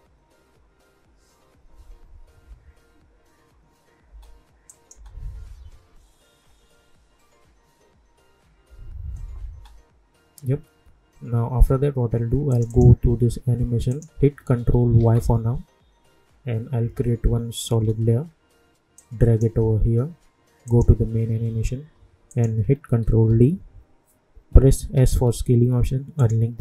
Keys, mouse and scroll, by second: 4.0 space, 4.7 click, 4.9 space, 9.4 space, 12.5 click, 14.9 ctrl+y, 17.7 Return, 18.9-20.6 drag, 23.0 ctrl+d, 24.9 s, 26.1 click.